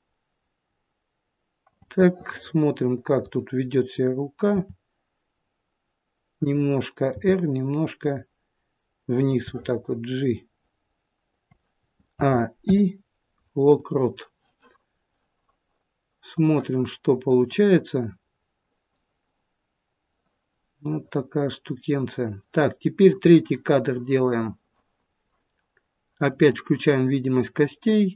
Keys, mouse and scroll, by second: 2.0 middle click, 4.5 r, 7.1 g, 9.4 middle click, 12.1 a, 12.5 i, 16.2 click, 17.5 click, 26.1 click, 27.5 middle click.